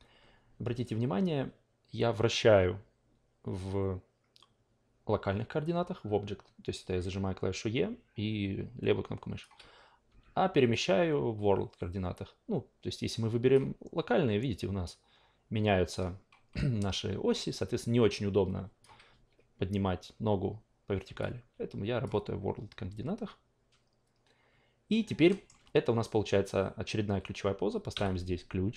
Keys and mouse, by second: 0.6 e, 0.8-9.4 drag, 10.7-13.5 drag, 10.7 w, 18.1-18.8 drag, 19.1 ctrl+z, 21.2 click, 21.2 w, 25.2 alt+middle click, 27.9 s.